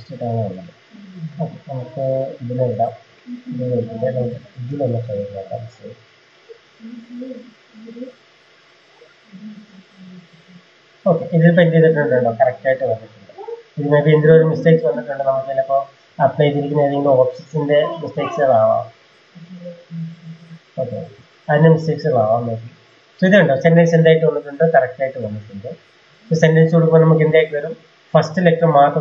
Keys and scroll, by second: 0.3 Escape, 1.1 Escape, 1.5 Escape, 3.0 Escape, 3.4 Escape, 3.6 Escape, 3.7 Escape, 3.8-4.7 typing, 16.7 ctrl+a, 24.2 Escape, 24.8-25.1 typing.